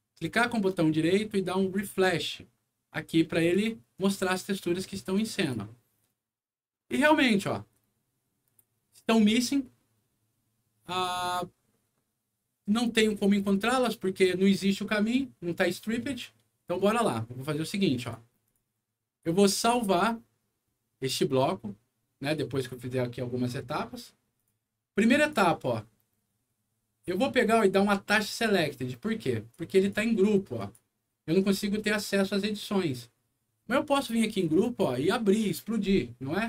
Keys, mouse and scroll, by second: 0.1 shift+right click, 3.4 click, 3.9 right click, 5.4 click, 11.0 click, 18.0 click, 18.4 click, 19.5 click, 24.3 click, 25.1 click, 29.5 click, 30.6 click, 34.4 click.